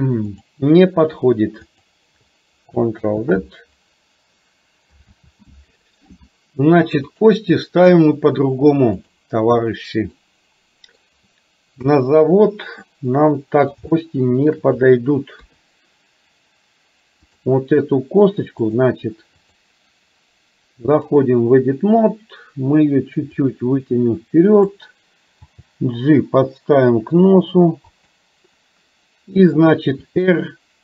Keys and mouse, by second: 0.4 click, 1.8 click, 3.1 ctrl+z, 5.2 ctrl+z, 7.2-9.2 drag, 10.2 middle click, 11.9 KP_3, 12.9 middle click, 14.1 shift+middle click, 15.4 KP_3, 17.3 click, 21.2 click, 23.6-24.8 drag, 25.4 g, 30.1 r.